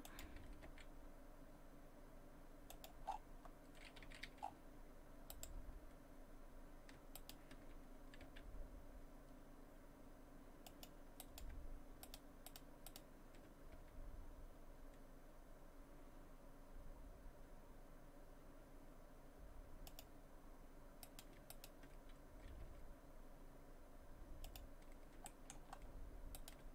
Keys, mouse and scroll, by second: 0.7 r, 3.1-3.4 scroll down 5, 4.1 a, 4.3 a, 4.4 scroll up 1, 4.4 a, 5.3 right click, 5.3-6.1 scroll up 4, 7.2 shift+right click, 8.3 g, 11.2 right click, 12.1 shift+right click, 13.5 shift+right click, 13.8 g, 21.1 right click, 21.5 shift+right click, 22.6 g, 25.3 shift+middle click, 25.9-26.4 scroll up 2, 26.4 right click.